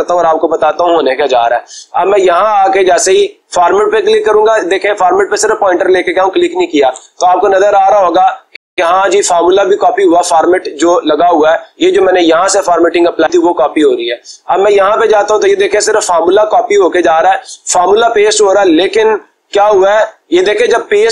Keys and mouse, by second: 0.2-1.2 drag, 2.6-3.7 drag.